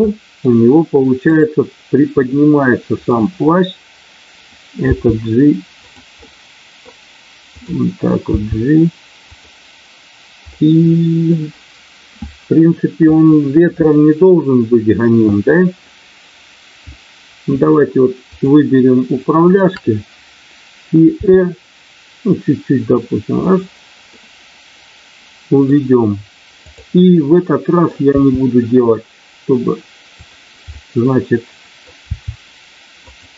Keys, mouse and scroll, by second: 0.0 middle click, 1.3 click, 2.3 middle click, 4.9 g, 6.1-6.9 scroll up 1, 7.5 click, 8.3 g, 10.5-11.0 scroll up 1, 11.0 middle click, 19.4 shift+click, 21.1 r, 23.5 click, 24.0-25.6 middle drag, 27.4 middle click, 28.1 r, 30.6-31.9 middle drag, 32.0 r, 33.0 click.